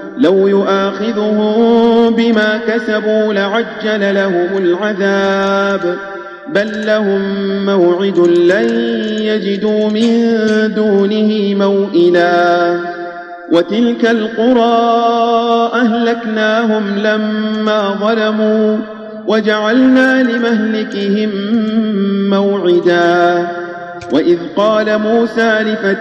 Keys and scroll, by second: 8.3 space, 10.8 Tab, 21.4 Tab, 23.9 Tab.